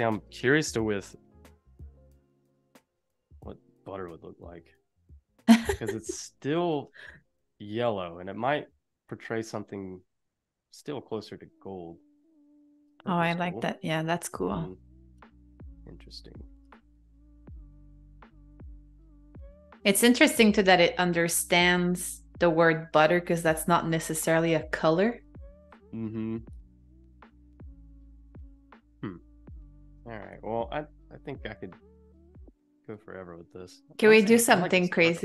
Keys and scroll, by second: 0.9-2.5 typing, 2.9 Return.